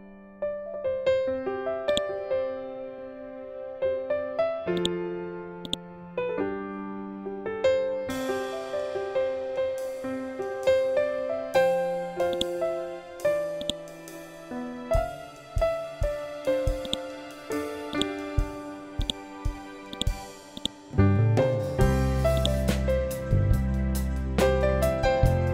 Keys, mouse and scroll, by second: 1.8 shift+click, 4.6-8.6 drag, 8.6 ctrl+z, 12.2-15.5 drag, 15.5 ctrl+z, 16.7-25.5 drag.